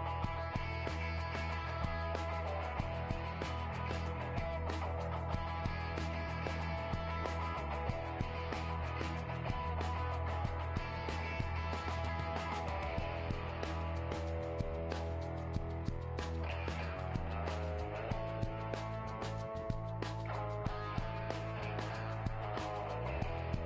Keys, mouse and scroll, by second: 2.2-4.9 middle drag, 2.9 g, 4.9 right click, 5.4 Tab, 8.1-9.7 middle drag, 8.1 right click, 8.5 g, 9.9 right click, 10.4-12.4 middle drag, 10.9 g, 13.1 right click, 13.4-16.5 middle drag, 13.7-15.9 right drag, 16.5 g, 17.5 right click, 18.0-19.9 middle drag, 18.7 g, 19.9-22.7 right drag, 21.6 g, 22.7 middle click.